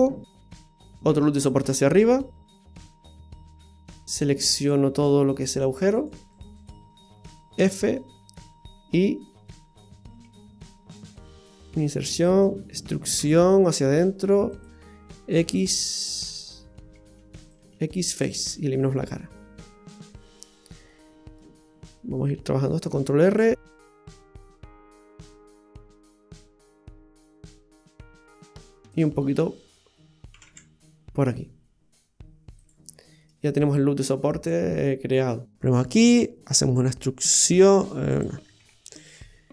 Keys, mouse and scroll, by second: 1.0 ctrl+r, 3.3 middle click, 3.8 click, 4.6 click, 5.6 right click, 6.0 right click, 6.4 alt+shift+right click, 6.4 alt+shift+right click, 7.1 alt+shift+right click, 7.6 f, 10.2 i, 13.2 e, 15.4 z, 17.6 x, 18.8 middle click, 20.3 scroll up 1, 20.9 middle click, 22.9 ctrl+r, 24.9 ctrl+r, 26.3 middle click, 28.5 ctrl+r, 30.3 g, 32.9-33.4 scroll down 2, 33.2 middle click, 34.2-35.1 scroll down 6, 34.8 middle click, 35.5 Tab, 35.5 right click, 35.5 middle click, 37.3 g, 38.6 ctrl+z.